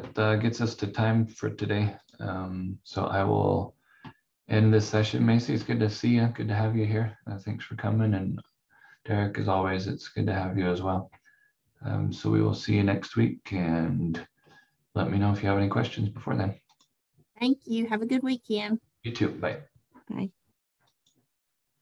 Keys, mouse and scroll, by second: 2.0 click.